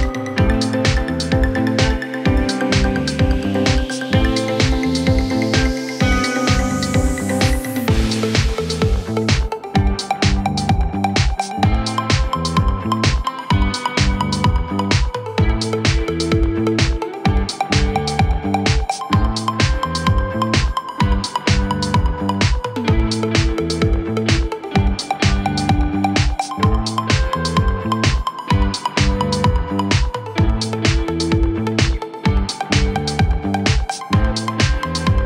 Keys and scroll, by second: 8.3 5, 8.6 Return.